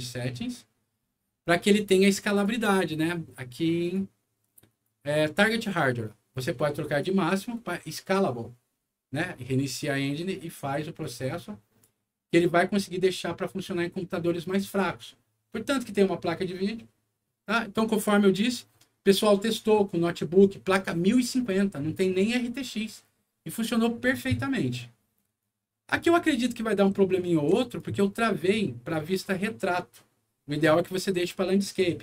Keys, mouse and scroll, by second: 2.3 click, 3.7 click, 4.6 click, 6.8 click, 9.6 click, 10.9 click, 18.0 right click, 25.3 right click, 26.9 right click, 27.2 d.